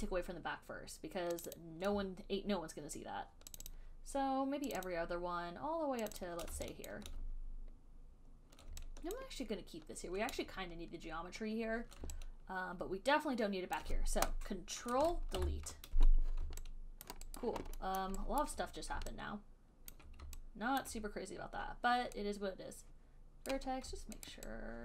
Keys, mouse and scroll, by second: 1.7 click, 1.8 click, 1.9 alt+click, 3.8 shift+click, 4.0 shift+click, 5.1 alt+click, 5.3 shift+click, 6.4 click, 6.5 shift+click, 7.2 alt+click, 9.5 alt+click, 14.1 alt+click, 15.6 ctrl+Delete, 17.3 alt+click, 17.7 alt+right click, 18.3 alt+middle click, 18.6 alt+right click, 19.7 alt+scroll, 20.2 alt+click, 21.1 alt+click, 21.1 alt+middle click, 23.8 right click, 24.6 alt+right click.